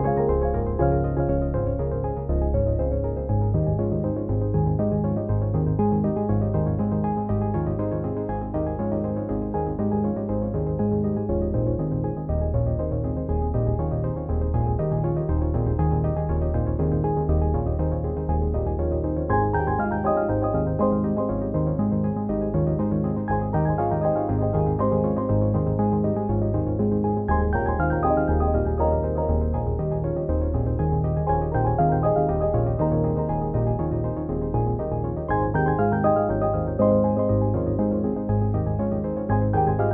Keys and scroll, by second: 22.5 b.